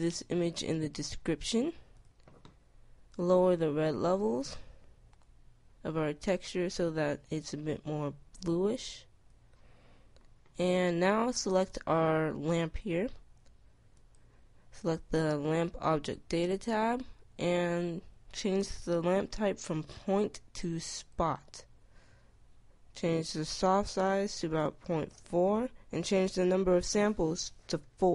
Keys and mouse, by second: 20.5-22.4 drag, 22.6-24.4 drag, 26.2-28.1 drag.